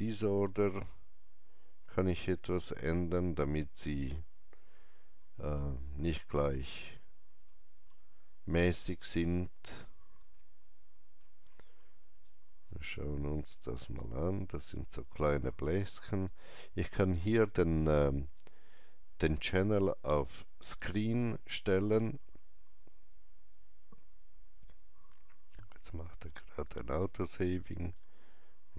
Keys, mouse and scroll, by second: 7.2 click, 7.2 scroll down 1, 7.8 scroll down 1, 8.8 middle click, 11.4-17.8 alt+drag, 12.6 alt+right click, 13.8 alt+middle click, 18.1 click, 18.1 alt+middle click, 18.1 alt+right click, 20.7 click, 27.8-28.7 drag.